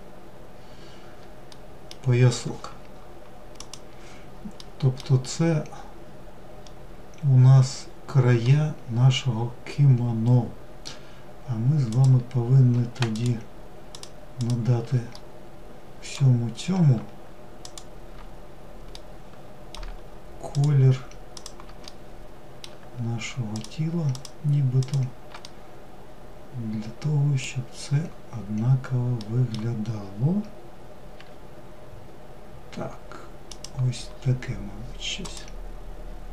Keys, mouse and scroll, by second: 0.8-2.9 middle drag, 3.8-5.8 middle drag, 5.8 scroll up 1, 6.6-7.8 scroll up 1, 11.1 click, 12.3 shift+click, 13.1 shift+click, 13.6 shift+click, 14.3-15.7 middle drag, 15.7-16.0 scroll up 2, 16.8 shift+click, 18.1-19.7 middle drag, 19.7 shift+click, 20.5 shift+click, 21.1-22.7 middle drag, 22.7 shift+click, 23.3 shift+click, 24.0 shift+click, 24.6-27.6 middle drag, 28.4-30.3 middle drag, 30.3 g, 33.3 scroll down 3, 34.4 click, 35.8-36.3 middle drag.